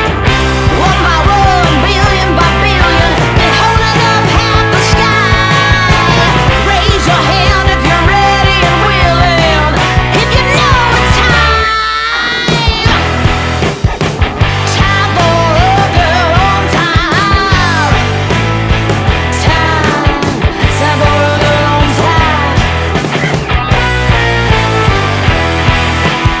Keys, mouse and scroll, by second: 1.6-6.5 drag, 9.0-12.8 drag, 12.8 alt+scroll up 1, 13.6-15.2 drag, 15.2 alt+scroll down 1, 15.9 ctrl+click, 17.0 alt+scroll down 1, 18.2 click, 18.7 space, 19.9 click, 23.3 alt+scroll down 1, 24.1 space, 24.2 click, 24.6 space.